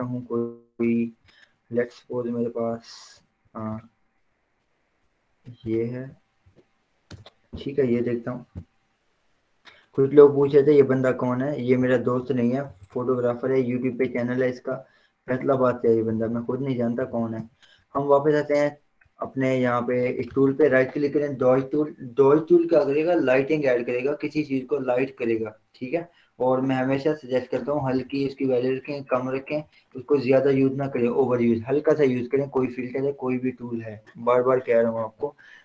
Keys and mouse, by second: 0.8 click, 3.7 click, 8.0 Return, 11.4-12.8 drag, 12.8 ctrl+0, 14.8 click, 16.6 ctrl+0, 17.2 ctrl+j, 17.6 z, 19.0-20.6 drag, 20.6 right click, 25.7 click, 28.0 ], 28.2 ], 29.7 ].